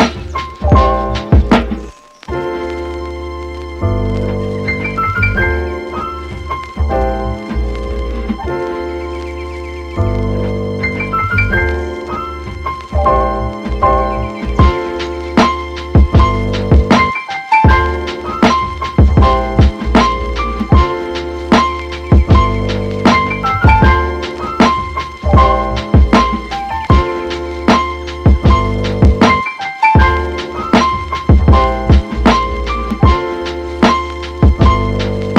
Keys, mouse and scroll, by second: 0.0-22.9 drag, 22.9 shift+d, 33.4 click, 33.8 Delete, 34.6 click, 34.9 Delete.